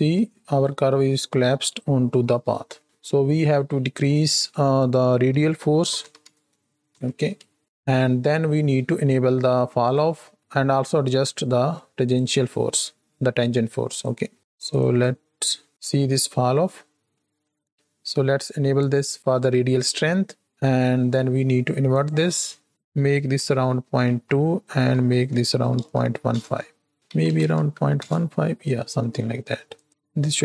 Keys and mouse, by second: 0.0 space, 0.5 click, 2.7 click, 4.2-6.3 drag, 6.8 shift+Right, 6.9 shift+Left, 7.4 space, 7.6 space, 7.7 click, 9.8 click, 10.2 click, 12.0 ctrl+shift+click, 13.9 ctrl+shift+click, 14.4 click, 14.9 click, 15.7 shift+Left, 15.7 shift+click, 17.1 middle click, 21.9 click, 22.7-26.3 drag, 26.9-28.0 drag, 29.7-30.4 drag.